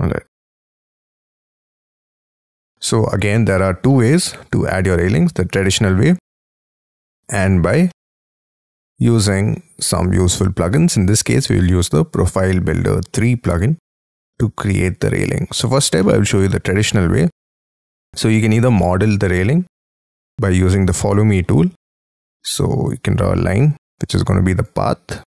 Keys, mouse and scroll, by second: 0.8 space, 0.9-1.9 scroll down 22, 1.9 middle click, 2.5 shift+middle click, 3.8 middle click, 5.3 middle click, 5.5-6.7 scroll up 5, 7.8 middle click, 9.6-10.1 scroll down 4, 14.6 middle click, 15.9 middle click, 17.4-18.7 scroll up 12, 18.7 middle click, 21.0 middle click, 21.9-23.2 scroll up 17, 23.2-23.6 scroll up 4, 23.6 l, 24.8-25.3 scroll down 36.